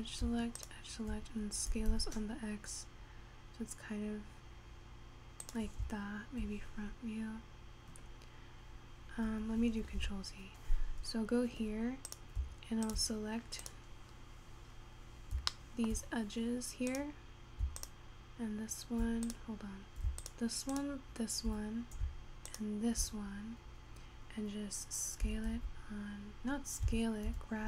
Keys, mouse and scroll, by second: 1.2 shift+click, 1.9 s, 10.3 ctrl+z, 11.9-12.2 scroll up 2, 12.2 click, 15.0-15.5 scroll up 4, 15.5-16.0 scroll down 2, 16.0-17.2 shift+middle drag, 17.2 click, 18.0 shift+click, 19.5 click, 21.5 shift+click, 23.0 shift+click, 23.5-24.6 scroll down 1, 25.4 s, 27.4 g.